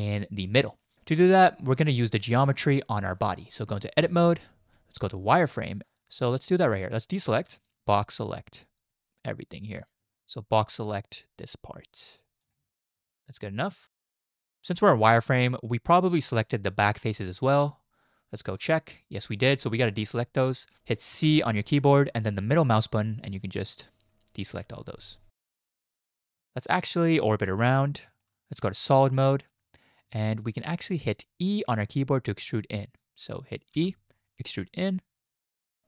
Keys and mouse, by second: 1.0 click, 4.0 Tab, 5.0 z, 7.2 click, 10.0-12.4 drag, 21.2 c, 26.9-27.8 middle drag, 28.1 shift+click, 28.6 z, 29.3 shift+click, 30.3 shift+click, 33.8 e.